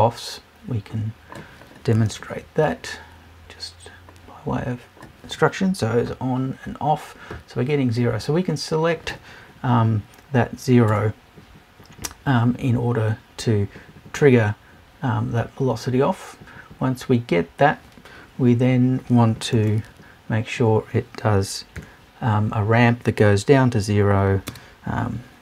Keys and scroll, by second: 10.9 BackSpace.